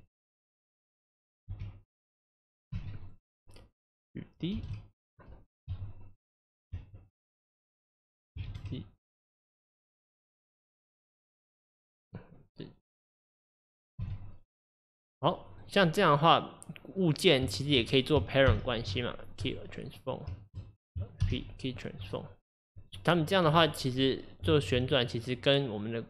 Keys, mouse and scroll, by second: 1.5 g, 4.6 shift+d, 7.9 click, 8.5 shift+d, 12.1 click, 13.0-14.7 drag, 14.7 x, 15.7 click, 17.0 click, 17.6 shift+click, 19.5 ctrl+p, 20.0 click, 20.4 shift+click, 22.1 ctrl+p, 22.9 click, 23.5 r, 24.4 click, 24.8 r.